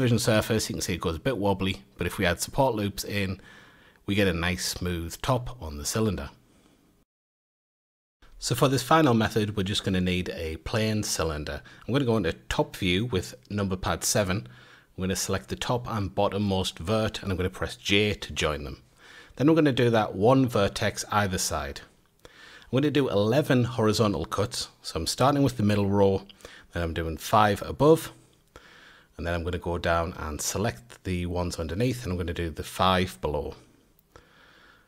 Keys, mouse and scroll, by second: 2.2 Tab, 2.5-3.6 right drag, 3.6-6.4 middle drag, 6.4 Tab, 7.0 F8, 7.5 shift+a, 11.1-11.7 shift+middle drag, 11.7 Tab, 12.1 scroll down 1, 12.4 1, 13.6 click, 15.7 j, 17.1 click, 18.1 j, 18.7 click, 19.8 j, 21.0 click, 21.9 j, 22.3 click, 23.1 j, 23.6 click, 24.3 j, 24.8 click, 25.6 j, 26.1 click, 26.7 j, 27.3 click, 28.5 j, 29.4 click, 30.2 j, 30.8 click, 31.6 j, 32.2 click, 33.0 j, 33.6 drag, 34.5 j.